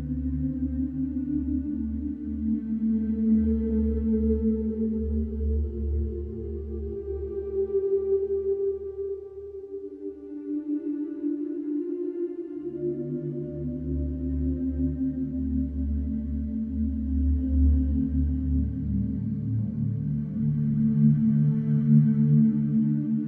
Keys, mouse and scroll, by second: 1.6 middle click, 2.3 click, 4.3 click, 6.9 ctrl+8, 8.9-9.9 scroll, 9.9 click, 13.0 click, 14.0-15.3 scroll, 16.6-17.5 scroll, 19.1 click, 20.4 click.